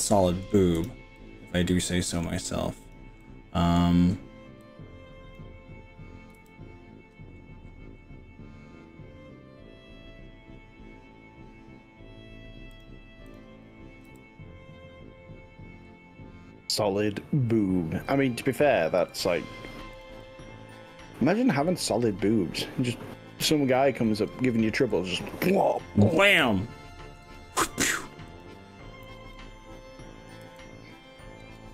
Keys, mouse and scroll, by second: 0.9 click, 1.2-2.3 middle drag, 2.9 click, 3.2 middle click, 4.7 click, 6.4 g, 7.3-7.7 scroll down 3, 7.7-8.3 scroll up 5, 8.9 scroll up 3, 10.3 scroll up 2, 12.7 drag, 13.3 click, 14.1 g, 15.7-16.1 scroll down 2, 16.1-16.9 scroll up 5, 17.5 drag, 18.1 click, 19.1 g, 20.1 click, 20.2-21.2 middle drag, 21.5 middle click, 22.6 middle click, 24.1 g, 24.9 x, 27.2 click, 28.3 click, 29.4 middle click, 30.3 click, 30.5 g.